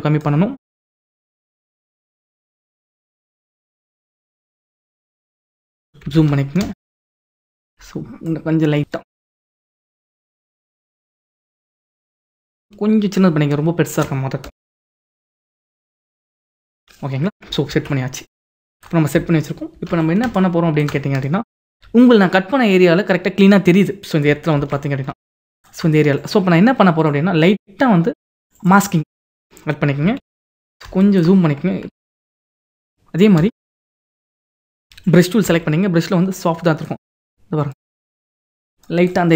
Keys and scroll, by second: 6.6 ctrl+=, 15.2 ctrl+-, 17.7 ctrl+=, 18.5 ctrl+=, 19.8 ctrl+=, 24.8 ctrl+=, 30.2 ctrl+=, 31.9 ctrl+=, 32.7 ctrl+=.